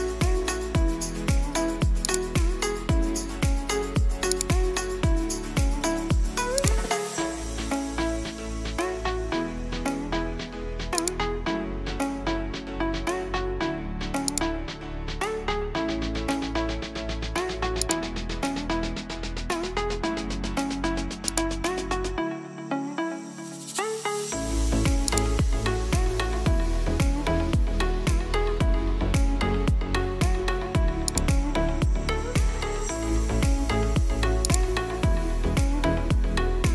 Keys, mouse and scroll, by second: 1.8 click, 4.0-24.9 drag, 30.7 click, 34.2 click, 36.1 ctrl+t.